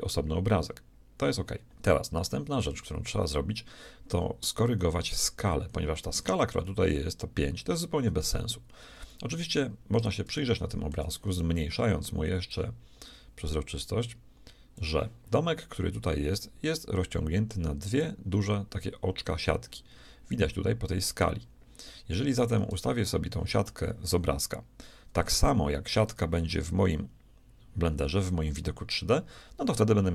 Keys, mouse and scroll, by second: 1.7 a, 3.2-5.9 middle drag, 9.3-12.5 middle drag, 12.5-14.5 drag, 20.6-25.5 scroll up 1.